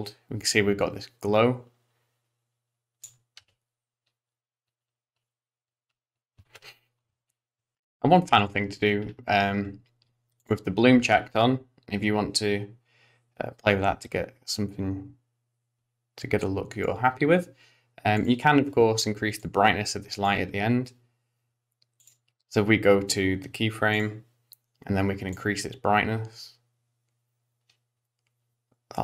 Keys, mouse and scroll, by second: 3.4 space, 8.4 click, 9.1-10.4 scroll up 1, 10.4 click, 10.4-10.9 scroll up 3, 12.4 click, 18.1 click, 19.4 click, 22.0 click, 24.0 click, 25.4 click.